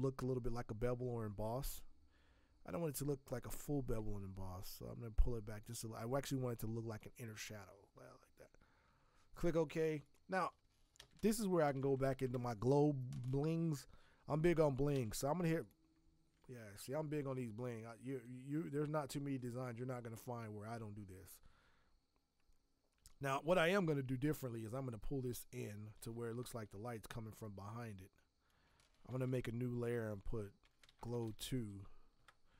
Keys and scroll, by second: 10.9 ctrl+shift+n, 11.4-12.5 typing, 14.9 b, 16.3 ctrl+z, 23.3 ctrl+t, 29.0 ctrl+shift+n, 29.9-31.6 typing, 32.1 Return.